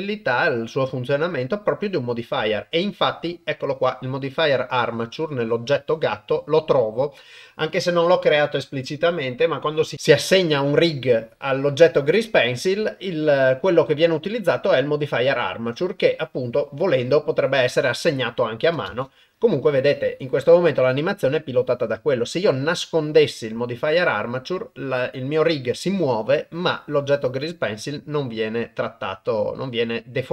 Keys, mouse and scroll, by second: 13.7-16.0 drag, 18.9 shift+space.